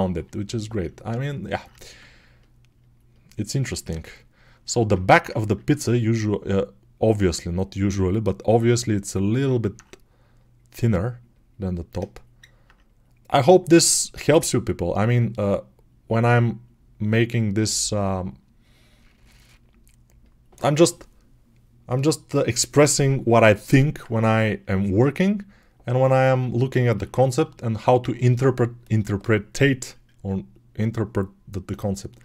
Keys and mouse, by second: 1.1-4.1 ctrl+drag, 3.8 alt+q, 9.5-32.1 alt+right drag.